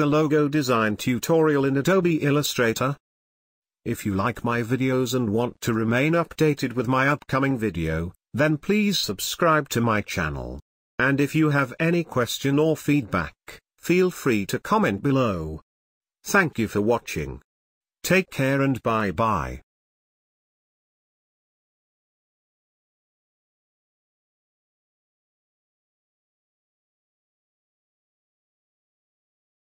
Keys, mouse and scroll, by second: 1.7 click, 5.6 click, 12.3 click, 12.4 ctrl+space, 12.7 ctrl+click, 12.9 ctrl+space, 13.8 space, 14.3-19.3 ctrl+drag, 19.3-21.5 ctrl+drag, 23.9 space, 24.2 ctrl+click.